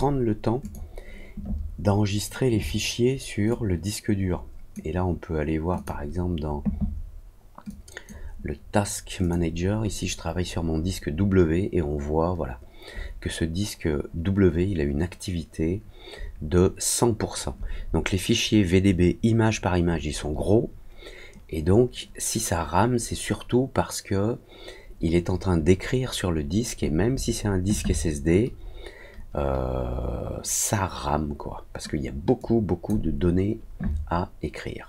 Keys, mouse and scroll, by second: 0.5 click.